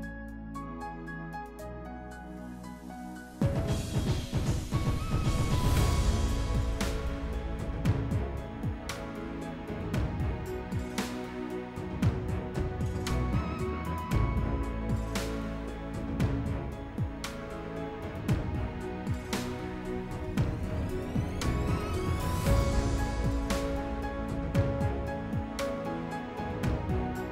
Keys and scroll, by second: 7.0 s, 15.6 s.